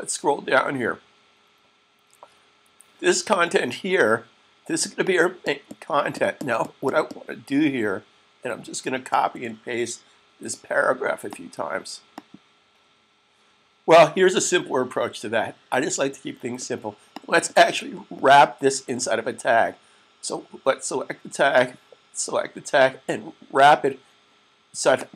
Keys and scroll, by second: 9.2 c.